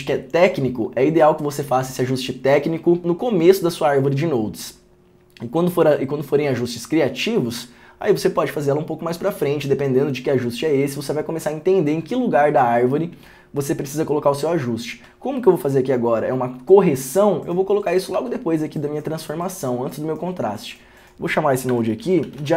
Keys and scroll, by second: 18.3 alt+s, 21.8 alt+s, 22.2-22.5 typing.